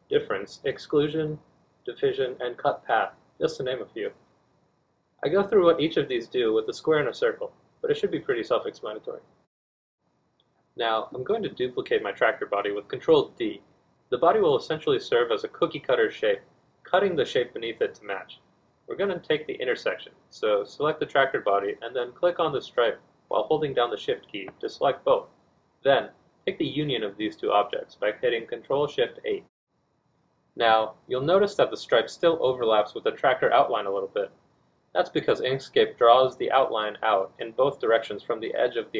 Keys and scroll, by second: 0.3 z, 4.8 F2, 4.9 F1, 6.1 z, 7.4 F2, 7.5 F1, 8.1 z, 8.3 F2, 9.1 z, 21.7 ctrl+d.